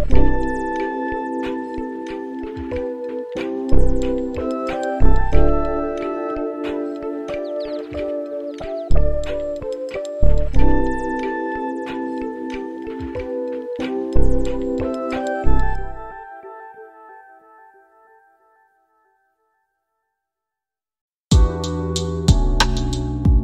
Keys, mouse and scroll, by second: 9.2-10.7 middle drag, 12.9 click, 15.5 click, 18.5-22.8 drag.